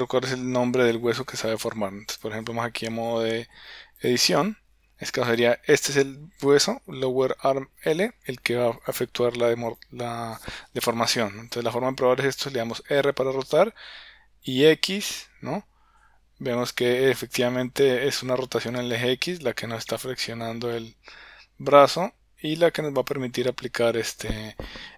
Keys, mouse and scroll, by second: 2.1-4.4 drag, 8.9-10.1 drag, 12.8 r.